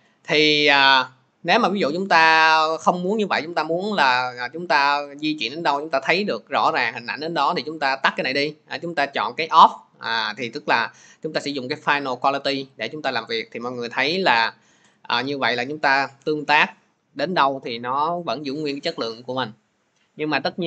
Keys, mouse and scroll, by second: 5.6 click, 7.9 click, 11.9 click, 18.2 click.